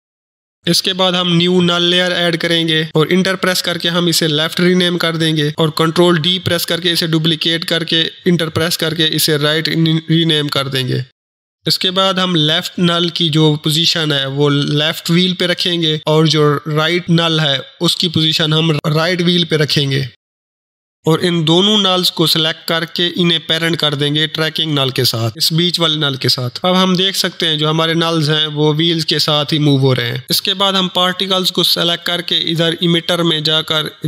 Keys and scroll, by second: 31.4 ctrl+s.